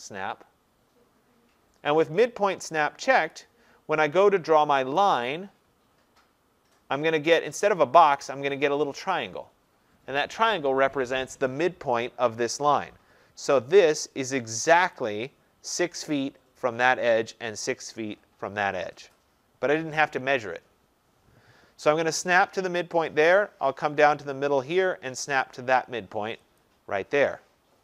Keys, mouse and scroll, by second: 3.4 click, 5.2 click, 15.0 click, 26.7 click.